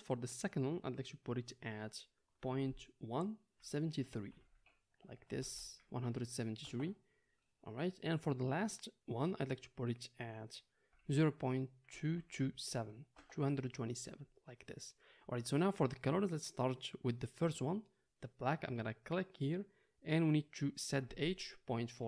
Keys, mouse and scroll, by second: 5.5 Left, 12.1 KP_2, 19.1-22.0 middle drag.